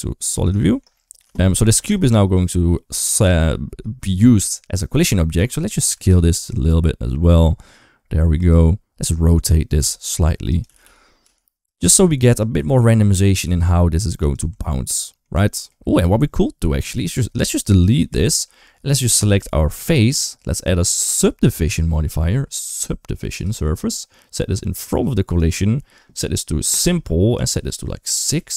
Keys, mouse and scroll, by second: 0.5 shift+middle click, 0.8 middle click, 1.2 shift+middle click, 1.5 middle click, 1.9 shift+middle click, 5.3 Tab, 5.5 a, 5.7 s, 9.6 r, 10.5 g, 11.8 r, 12.4 g, 14.3 Tab, 14.5 middle click, 15.3 shift+middle drag, 15.6 middle drag, 17.9 Delete, 19.0 click, 19.6 click, 20.9 click, 21.5-23.2 drag, 24.6 click, 26.5 click, 27.2-28.5 drag.